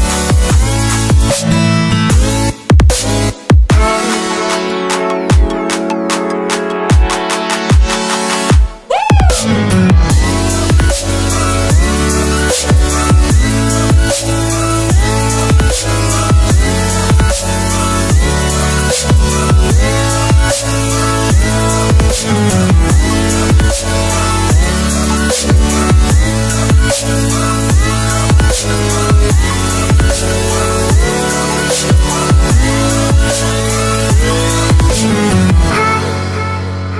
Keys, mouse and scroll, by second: 0.4 ctrl+c, 0.6 alt+Tab, 1.2 ctrl+v, 1.6 click, 5.2 click, 5.5 ctrl+t, 5.9 click, 6.5 Return, 7.0 Left, 7.4 scroll up 1, 7.8 click, 8.7 alt+click, 8.8 scroll down 1, 9.3 click, 12.6 Return, 13.0-13.6 scroll up 1, 13.6 click, 17.5-17.9 alt+scroll up 2, 17.9 ctrl+t, 18.3 click, 20.2 Return, 20.3 Up, 20.7 Down, 21.1 ctrl+0, 21.3 click, 22.5 click, 22.9-23.3 scroll up 1, 23.3 click, 23.6 right click, 24.6 click, 31.7 ctrl+shift+s, 33.1 click.